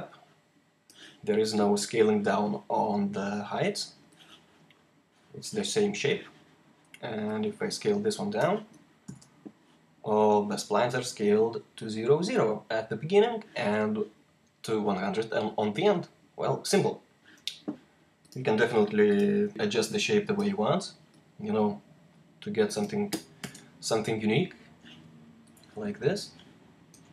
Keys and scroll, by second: 8.9 r, 23.3 r.